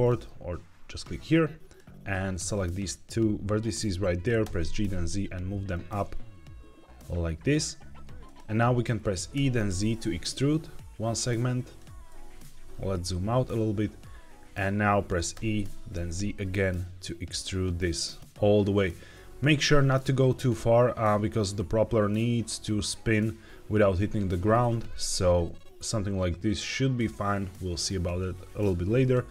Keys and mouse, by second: 1.2 click, 4.3 g, 4.6 z, 8.1 click, 9.2 e, 9.6 z, 11.5 click, 12.0 shift+middle click, 15.2 e, 15.8 z, 19.0 click, 24.7 g, 24.8 z, 27.9 click.